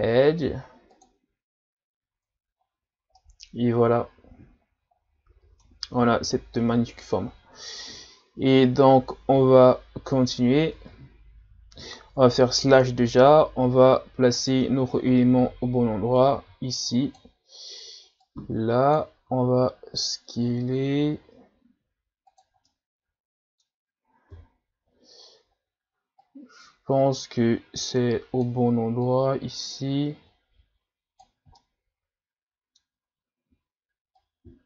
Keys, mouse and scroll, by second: 2.1 Tab, 2.6-3.0 scroll down 2, 3.2-6.2 middle drag, 7.3-7.9 scroll up 2, 9.5-9.8 scroll down 2, 10.7 Tab, 12.2 KP_Divide, 13.4 scroll up 3, 14.4 right click, 15.4 l, 16.2 click, 19.3 s, 22.7-24.3 middle drag, 24.3 KP_3, 25.1-25.8 scroll up 1, 26.2-31.6 drag, 31.6-34.2 middle drag, 34.2 click.